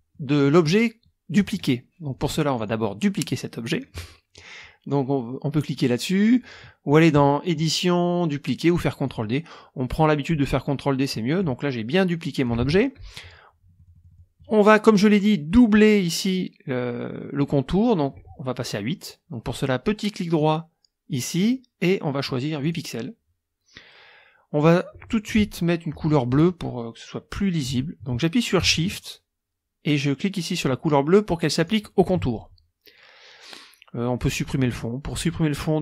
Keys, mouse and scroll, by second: 0.1 click, 1.0 click, 2.0 click, 2.5 click, 7.5 click, 9.0 click, 10.0 middle click, 10.2-11.3 drag, 11.4-12.6 drag, 12.5 ctrl+z, 13.7 middle click, 14.6 click, 18.6 right click, 20.4 click, 21.1 right click, 22.6 click, 31.6 shift+click.